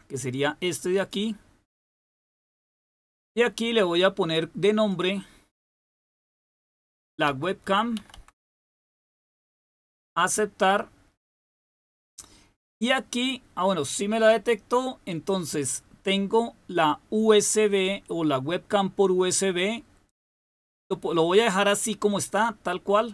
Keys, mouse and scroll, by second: 0.9 click, 3.3-4.9 drag, 6.2-8.6 typing, 11.3 click.